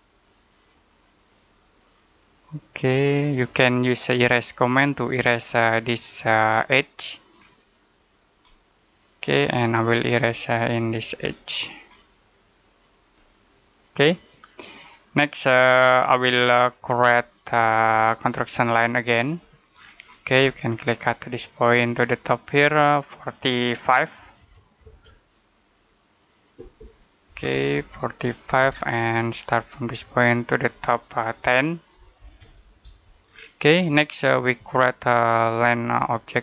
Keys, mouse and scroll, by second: 0.0 click, 6.3 scroll down 1, 6.8 middle click, 7.8 click, 8.3 middle click, 10.4 click, 11.2 middle click, 12.5 click, 13.1 middle click, 19.0 click, 19.6-19.9 scroll down 1, 19.9-20.2 scroll up 1, 21.4 click, 24.0 4, 24.7 space, 27.1 BackSpace, 27.6 Return, 29.6 click, 31.2-32.6 typing, 32.7 Return, 33.1-35.3 scroll down 1, 35.3 click.